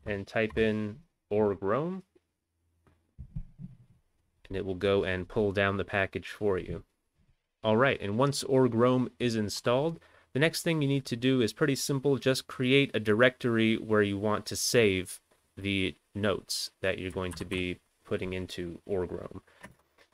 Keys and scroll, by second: 0.0-0.1 typing, 1.2 Return, 17.3 ctrl+x, 17.5 ctrl+f, 19.7 BackSpace.